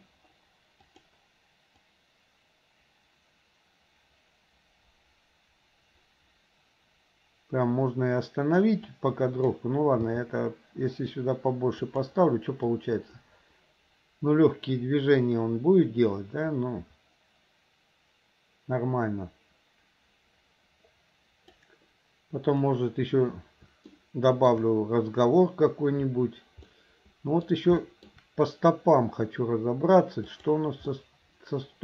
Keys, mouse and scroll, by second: 0.8 g, 1.9-8.8 drag, 8.9 click, 11.5 g, 12.8-21.7 drag, 23.9-24.6 shift+middle drag, 26.8-27.5 middle drag, 27.8 shift+middle drag, 30.3 click, 31.0-31.8 middle drag.